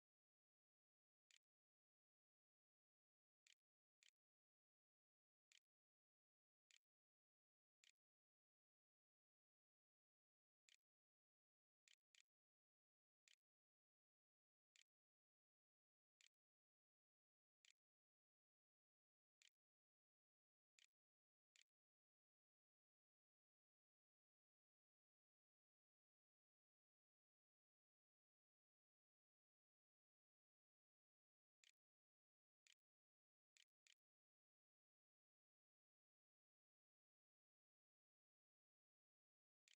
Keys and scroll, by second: 0.0-2.1 typing, 3.3-7.7 typing, 10.5-18.2 typing, 18.0 Delete, 18.3 Return, 19.6 shift+Return, 20.0-22.6 typing, 21.1 Return, 23.7 s, 30.4-35.3 typing, 39.3 space.